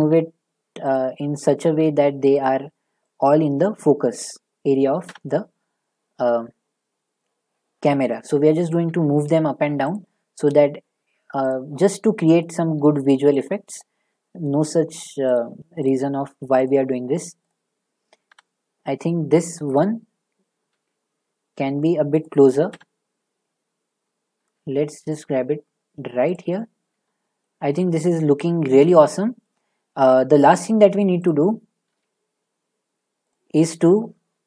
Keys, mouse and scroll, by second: 0.0 g, 0.9 click, 1.5 click, 1.7 g, 2.4 click, 3.2 click, 3.2 g, 4.3 click, 5.1 0, 8.9 g, 9.9 click, 10.5 click, 10.8 g, 11.5 click, 12.4 click, 12.8 g, 13.4 click, 13.8 click, 14.0 g, 15.3 click, 15.9 click, 16.6 click, 17.5 click, 18.3 0, 19.7 click, 20.7 g, 22.2 click, 22.7 0, 24.4 g, 27.4 click, 29.4 shift+middle click, 30.8 middle click, 31.3 click, 31.9 g, 33.3 click.